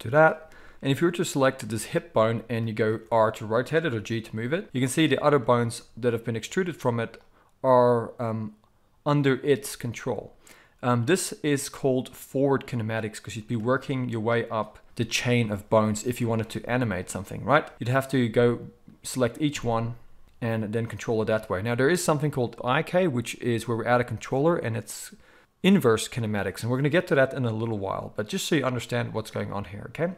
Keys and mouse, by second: 3.0 r, 4.6 g, 13.0 click, 13.2-14.5 middle drag, 14.5-17.7 drag, 15.7 r, 17.7-30.1 middle drag, 20.2 r.